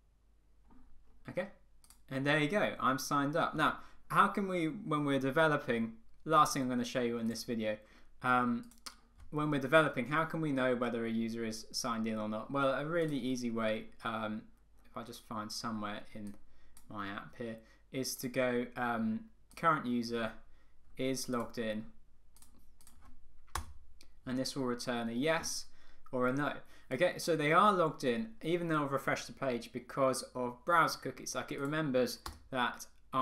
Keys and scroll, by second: 23.7 Return, 32.4 Return.